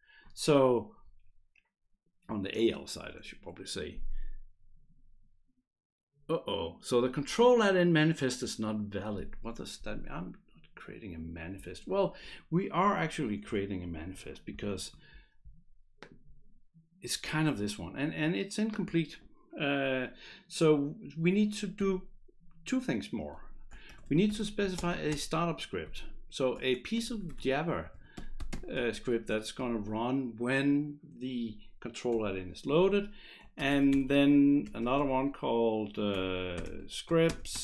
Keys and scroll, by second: 14.6 shift+F5, 23.6-29.0 typing, 32.1 Return, 33.3-34.6 typing, 36.1-37.6 typing, 37.1 Return.